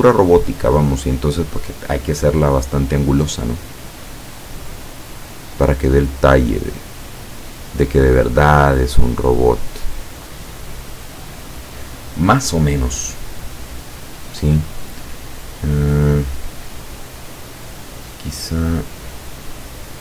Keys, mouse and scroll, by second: 4.9-6.6 drag, 7.2 click, 8.8-10.6 drag.